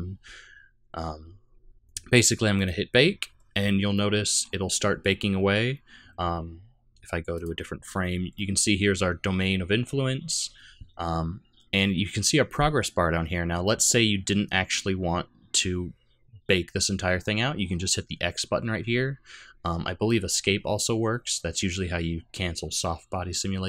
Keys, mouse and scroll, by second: 2.6 click, 4.0 middle click, 7.4 click, 8.4 middle click.